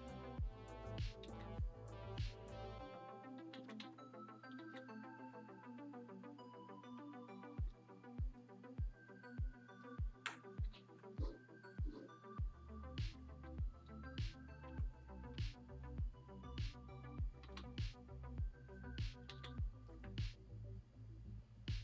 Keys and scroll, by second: 1.2 ctrl+z, 3.5 ctrl+z, 3.8 x, 4.6 ctrl+z, 7.3 ctrl+z, 14.6 x, 17.4 ctrl+z, 19.2 ctrl+z.